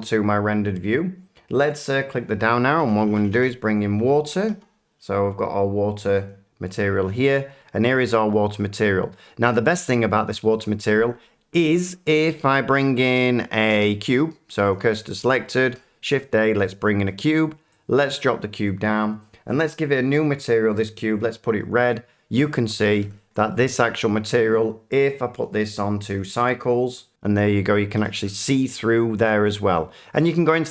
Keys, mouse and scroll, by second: 0.9-4.0 drag, 2.8-4.5 typing, 6.2 click, 7.6 middle click, 8.3 middle click, 9.1 shift+middle click, 10.3-10.7 scroll, 12.1 shift+middle click, 13.7 s, 14.7 click, 15.6 a, 16.7 click, 17.2 middle click, 18.2 click, 19.5 click, 20.5 click, 21.2 click, 21.9 middle click, 22.8-23.2 typing, 23.5 middle click, 24.6 shift+middle click, 25.4 click, 26.1 click, 27.1 click, 27.2 middle click, 27.6 scroll, 27.9 a, 28.3 a.